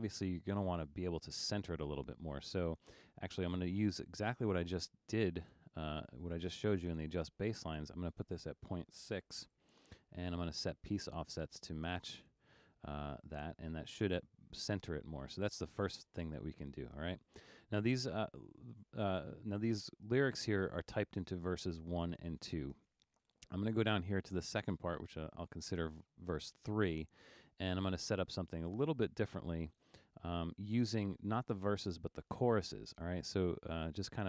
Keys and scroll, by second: 8.9 BackSpace, 9.6 6, 25.1 super+=, 26.5 super+=.